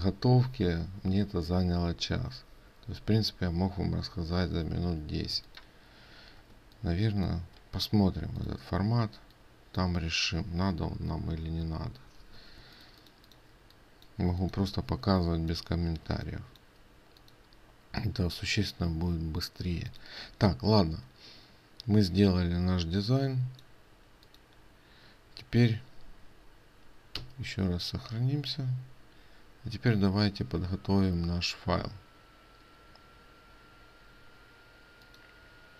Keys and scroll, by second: 7.1 ctrl+space, 10.3 ctrl+space, 20.4 ctrl+alt+space, 27.8 ctrl+s.